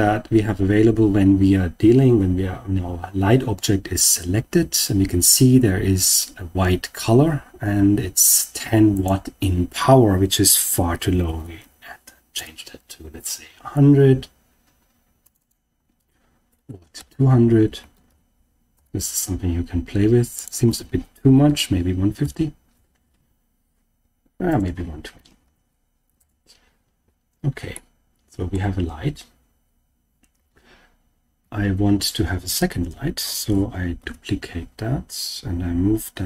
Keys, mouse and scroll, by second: 8.9-12.3 drag, 11.5 0, 15.2-18.7 drag, 16.6-18.0 typing, 20.3-22.2 drag, 24.4-26.1 drag, 27.7-28.5 middle drag, 30.3 KP_1, 31.4 KP_3, 33.9 shift+d.